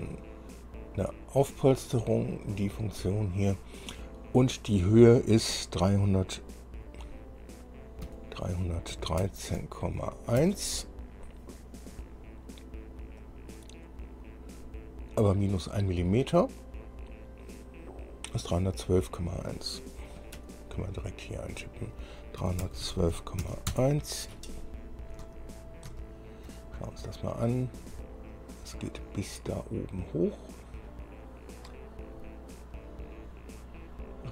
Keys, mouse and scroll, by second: 1.6 click, 3.2 click, 8.2 KP_3, 9.1 KP_1, 9.8 KP_3, 10.6 KP_1, 13.4 click, 18.7 click, 20.6 Escape, 21.8 click, 22.6-23.6 typing, 23.9 KP_Enter, 25.1-25.4 scroll down 2, 25.8-26.2 shift+scroll down 3, 26.2 shift+click, 27.0-27.6 shift+scroll up 3, 27.9 scroll up 2, 28.5-34.3 middle drag.